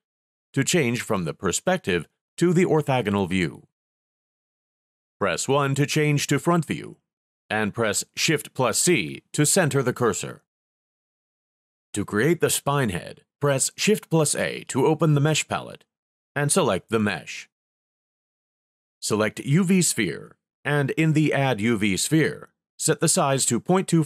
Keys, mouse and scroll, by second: 4.6 KP_1, 6.3 shift+c, 14.5 shift+a, 19.3-21.2 drag.